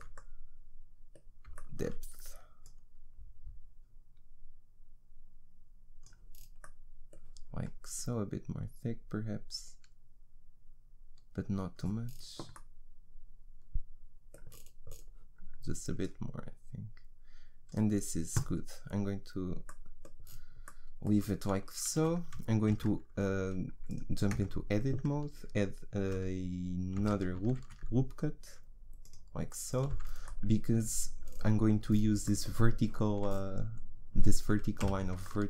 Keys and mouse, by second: 2.6-6.4 drag, 8.0-12.0 drag, 12.0 middle click, 14.5 middle click, 16.0-20.2 drag, 20.2 middle click, 22.0 a, 22.7 ctrl+r, 24.3 Tab, 27.0 a, 27.6 ctrl+r, 30.2 click, 34.8 a.